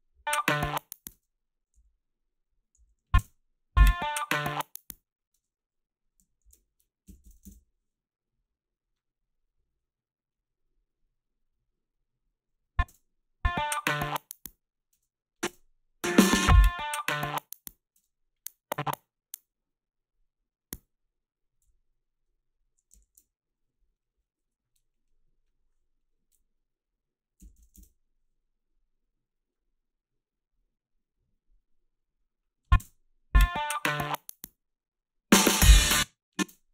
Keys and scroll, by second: 1.1 space, 1.7 s, 2.9 a, 3.2 space, 5.3 space, 6.8-7.9 typing, 12.9 space, 15.0 space, 15.5 space, 18.0 space, 21.6 g, 27.2-28.2 typing, 32.8 space, 35.7 space, 36.4 space.